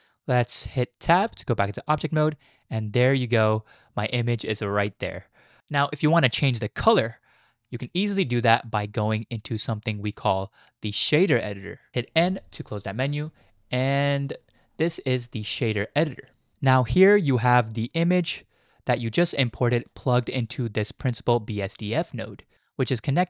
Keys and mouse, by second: 1.2 Tab, 10.2-11.6 drag, 12.2 n, 13.2-14.3 drag, 16.3 click, 17.0 click, 17.2-19.9 drag, 20.4-22.5 drag.